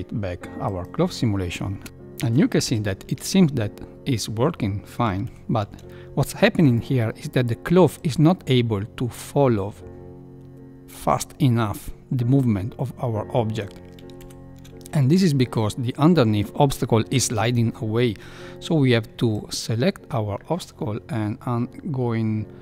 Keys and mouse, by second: 0.7 click, 1.8 space, 2.4 Left, 3.1 Left, 5.9 shift+Left, 7.9-13.5 drag, 14.2 shift+Left, 19.5-20.5 drag.